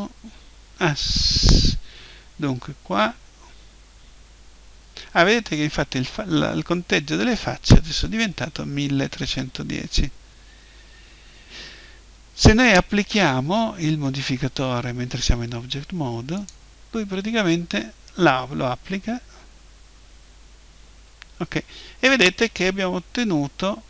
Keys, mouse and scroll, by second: 16.3-20.1 drag.